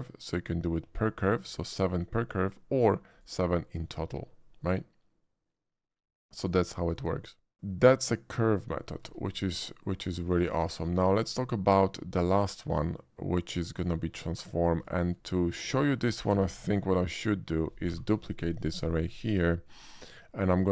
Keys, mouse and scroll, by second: 3.1 click, 5.9 click, 6.5 click, 6.8 click, 9.1 a, 9.3 x, 9.4 a, 9.9 click, 10.4 shift+a, 13.7 click, 14.2 middle drag, 14.9 shift+middle drag, 15.2 shift+middle drag, 16.2 shift+d, 16.5 x, 17.9 y, 18.3 click, 18.9 shift+middle click, 19.5 shift+middle click.